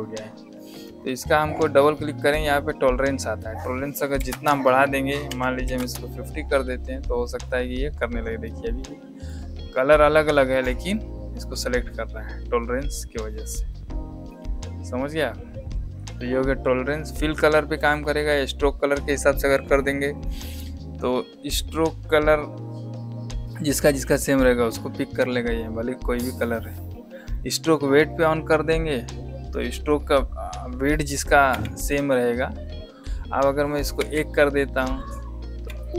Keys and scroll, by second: 4.2 Insert, 5.2 Num_Lock, 5.5 KP_5, 5.7 KP_0, 31.4 v, 33.9 KP_1, 35.6 v.